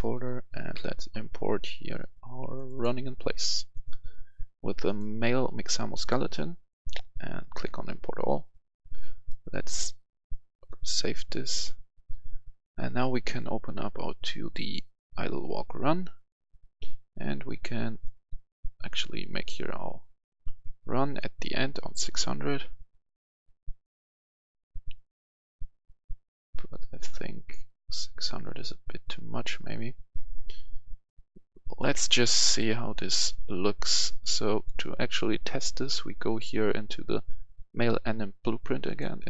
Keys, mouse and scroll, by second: 1.0 scroll down 1, 2.4-18.2 drag, 21.1-31.7 shift+drag, 32.5 click, 35.8 right click, 38.7 click.